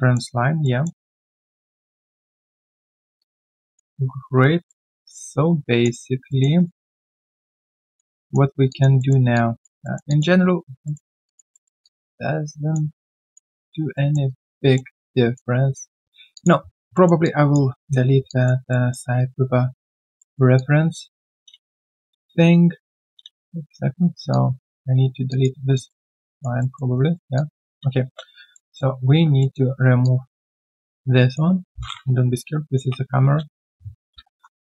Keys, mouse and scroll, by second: 1.0 alt+right click, 2.8 alt+middle click, 3.2 alt+click, 4.0 alt+right click, 4.3-4.7 alt+scroll down 1, 4.7 alt+middle click, 5.0 alt+click, 5.9-6.3 alt+scroll down 1, 6.3 alt+middle click, 6.5 alt+right click, 6.7 alt+click, 7.6 alt+middle click, 7.9 alt+click, 8.4 alt+right click, 8.7 alt+click, 9.0 alt+middle click, 9.3 alt+click, 9.8 alt+middle click, 10.0 alt+click, 10.5 alt+right click, 10.8 alt+middle click, 11.2 alt+scroll down 1, 11.5 alt+middle click, 11.8 alt+click, 12.9 alt+right click, 13.2 alt+click, 13.5 alt+right click, 13.9 alt+middle click, 14.2 alt+right click, 14.6 alt+middle click, 14.9 alt+click, 15.9-16.3 alt+scroll down 1, 16.3 alt+click, 16.6-16.9 alt+scroll down 1, 16.9 alt+middle click, 17.2 alt+click, 18.1 alt+click, 18.2 alt+click, 18.7 alt+middle click, 19.1 right click, 20.1 right click, 20.5 alt+middle click, 20.5 alt+click, 21.5 space, 23.2 space, 24.1 space, 24.3 alt+click, 24.8 alt+right click, 25.7 alt+right click, 25.7 alt+middle click, 26.0 alt+right click, 26.2 alt+click, 26.6 alt+middle click, 26.9 alt+right click, 27.3 alt+click, 28.5 alt+middle click, 29.1 alt+scroll down 1, 29.4 alt+middle click, 33.6 right click, 33.8-34.6 typing.